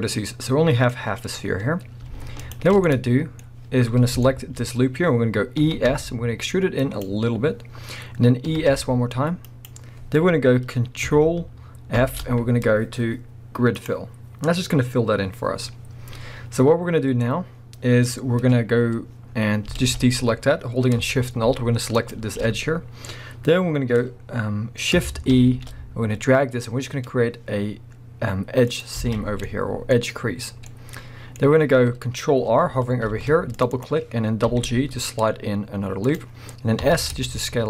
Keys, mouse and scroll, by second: 0.5-2.4 middle drag, 2.4 alt+shift+click, 2.8-7.1 middle drag, 3.4-4.2 scroll up 2, 5.6 e, 7.1 click, 8.5 e, 9.6 click, 11.9 ctrl+f, 15.9-18.1 scroll down 1, 19.3-19.8 scroll up 1, 19.8 alt+a, 22.0 alt+shift+click, 25.3 shift+e, 28.8 click, 29.0 alt+a, 29.5-33.8 middle drag, 33.0 ctrl+r, 33.8 click, 34.5 g, 36.2 click, 36.8 s.